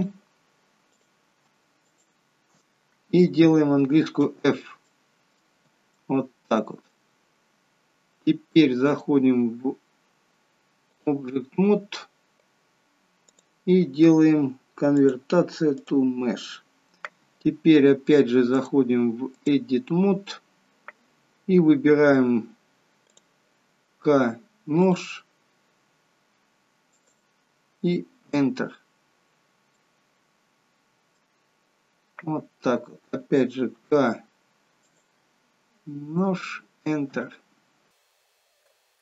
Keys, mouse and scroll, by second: 1.9 alt+shift+click, 4.1 f, 4.8 middle click, 5.9 shift+middle click, 8.9 click, 13.1 click, 15.8 click, 18.7 click, 23.1 click, 23.9 k, 29.3 scroll up 3, 29.7 middle click, 31.6 scroll down 1, 33.6 k, 38.3 k.